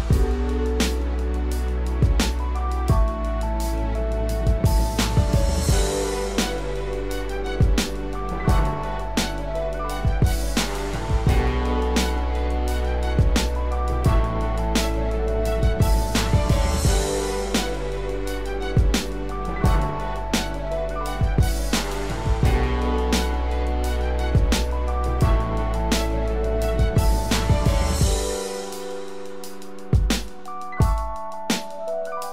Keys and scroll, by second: 4.7 ctrl+z, 10.1 ctrl+-, 15.5 ctrl+=, 28.8 ctrl+0.